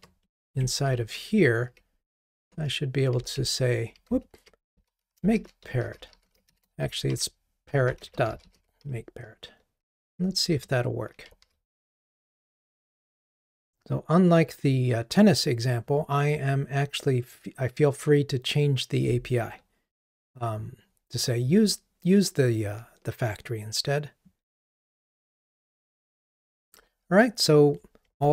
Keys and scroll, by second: 1.2 super+r, 3.4 super+v, 11.5 ctrl+r.